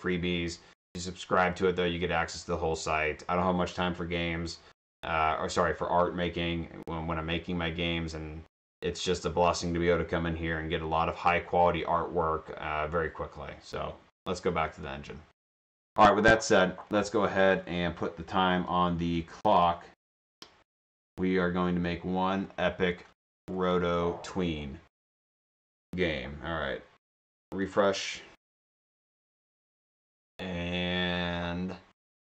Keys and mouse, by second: 14.8 click, 16.0 click, 18.6 click, 20.1 click, 22.5 click, 25.1 right click, 27.7 click.